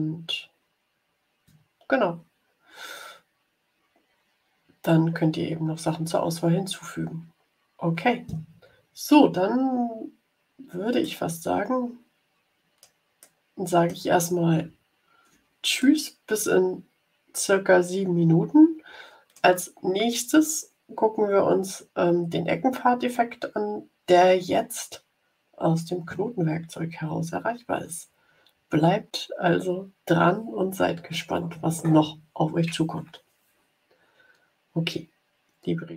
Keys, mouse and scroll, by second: 10.9-12.9 drag, 13.1 click, 13.3 middle click, 14.7 ctrl+scroll up 2, 15.7-19.4 drag.